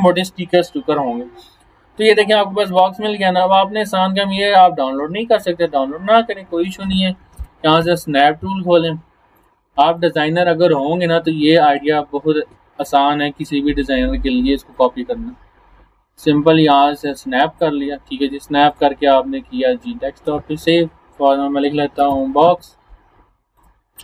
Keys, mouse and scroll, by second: 5.4 click, 6.9-8.3 typing, 9.4 click, 14.7-17.8 drag, 21.7-23.0 typing, 23.6-24.0 drag.